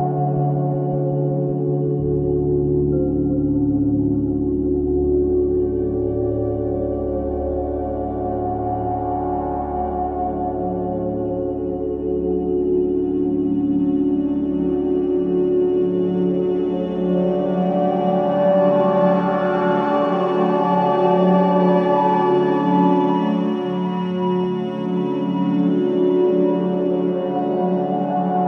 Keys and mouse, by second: 0.6 Tab, 1.8 ctrl+e, 3.4 ctrl+r, 4.5-5.5 drag, 5.5 ctrl+r, 9.6-10.7 drag, 10.7 middle click, 11.1-11.6 drag, 11.5 Tab, 13.1 KP_1, 14.2 z, 16.1 z, 18.6 click, 19.8 z, 22.5 s, 25.7-27.8 drag, 26.9 s.